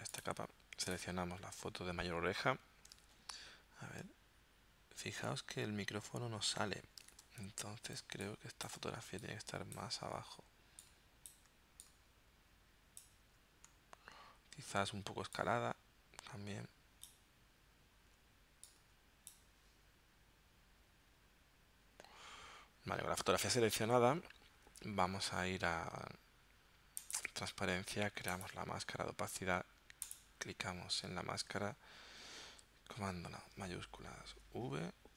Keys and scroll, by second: 3.0 super+Tab, 7.3 super+Tab, 8.1 space, 34.3 shift+super+v.